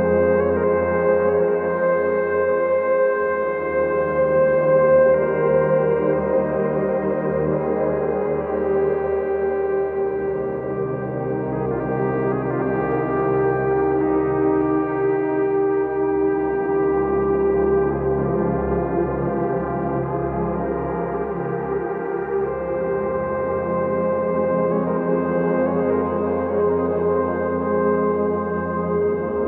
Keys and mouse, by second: 0.8 click, 1.3 click, 2.0 click, 2.5 click, 3.6 KP_Divide, 3.6 KP_Multiply, 4.0 KP_3, 4.8 KP_8, 5.2 KP_Divide, 8.8 KP_Divide, 9.1 KP_3, 9.9 Tab, 12.7 click, 13.5 Tab, 15.0 z, 16.2 alt+z, 19.8 k, 22.7 click, 25.6 click, 26.2 click, 28.7 click, 29.2 click.